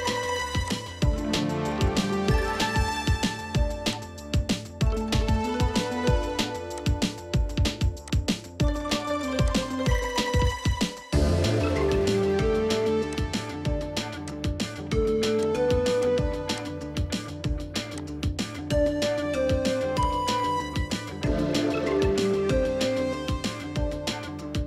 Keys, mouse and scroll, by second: 4.9 scroll down 1, 5.0 scroll up 1, 5.2 middle click, 10.4 middle click, 20.3 middle click, 21.7 1, 24.5 middle click.